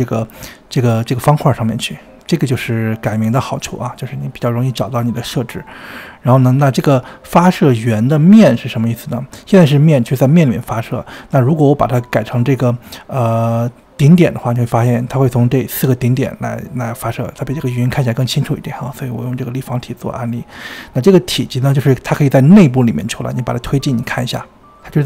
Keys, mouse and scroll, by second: 0.1 space, 2.4 space, 3.2 click, 6.9-10.5 drag, 11.1 space, 11.9 space, 12.9-14.7 drag, 14.7 space, 16.3-19.2 middle drag, 19.2-22.0 drag, 22.0 middle click, 22.9-23.9 scroll up 45, 23.9 scroll down 2, 24.2-24.9 scroll up 20.